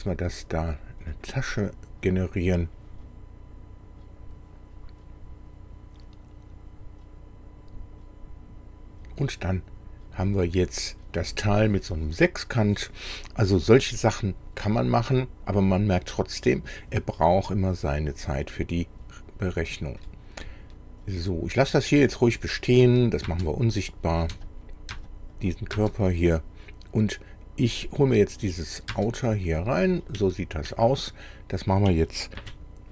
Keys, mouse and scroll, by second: 1.2 click, 9.3-10.3 middle drag, 10.6 middle click, 18.2 click, 23.3 space, 24.4 space, 25.4 click, 25.8 space, 28.2 click, 28.9 space, 29.8 scroll down 2, 30.3 shift+middle click, 32.4 ctrl+d.